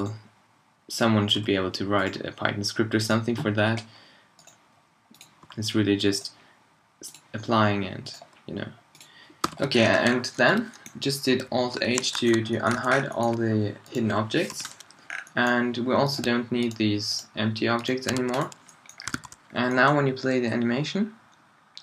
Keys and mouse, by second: 1.4 h, 3.6 h, 5.4 h, 7.4 h, 9.4 h, 9.7-10.0 middle drag, 10.0-10.4 drag, 11.8 alt+h, 12.8 a, 14.5 h, 18.2 x, 19.1 alt+a.